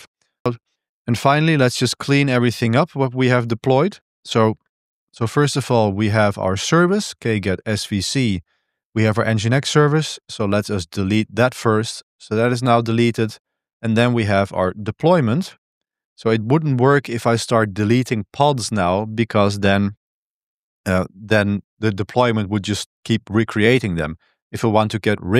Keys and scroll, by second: 0.0 super+1, 0.2-5.5 typing, 2.2 Escape, 6.6-8.1 typing, 10.1 ctrl+v, 11.2 Return, 13.7-15.9 typing, 15.9 Return.